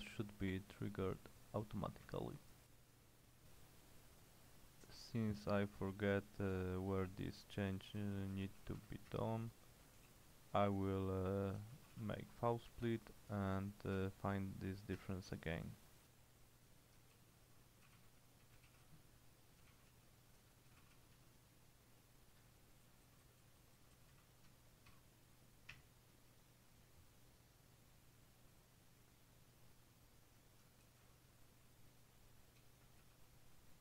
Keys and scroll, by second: 2.2 Return, 7.8-9.1 typing, 9.2 Return, 10.0 ctrl+w, 10.2 l, 11.6-13.0 typing, 13.4 Tab, 14.0 Return, 15.0 Return, 17.2-23.7 typing, 23.7 Left, 23.9 Left, 25.0 :, 25.8 Return, 30.9 ctrl+w, 31.1 ctrl+h, 32.4-33.6 typing.